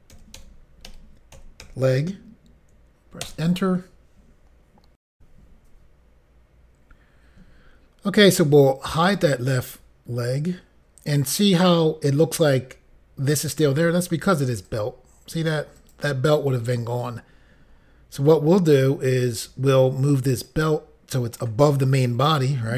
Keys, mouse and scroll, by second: 1.9 typing, 3.3 Return, 5.1 Insert, 9.0 click, 14.6 click, 15.7 click, 16.3 click, 16.9 click, 20.5 click.